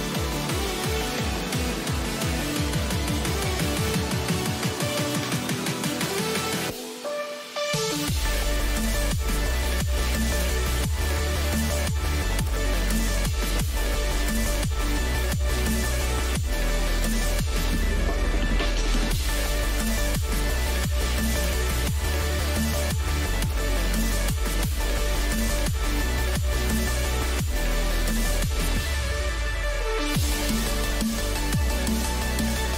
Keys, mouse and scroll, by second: 0.9 k, 17.5 a, 18.3 middle click, 24.5 ctrl+z, 25.1 ctrl+z, 26.2 middle click, 26.6 a, 27.0 a, 30.5-32.7 middle drag.